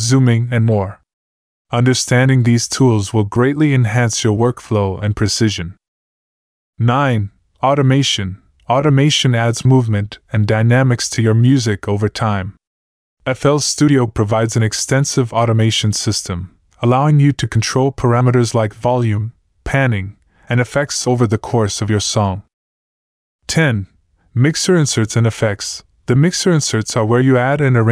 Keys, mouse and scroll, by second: 0.6 click, 0.8 F1, 12.1 click, 12.3 click.